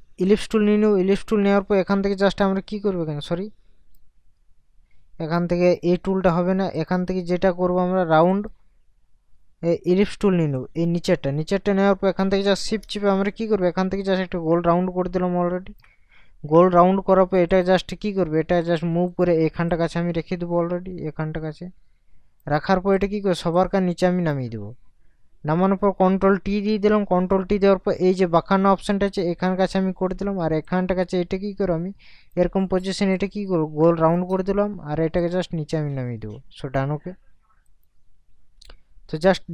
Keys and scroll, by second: 26.4 ctrl+t.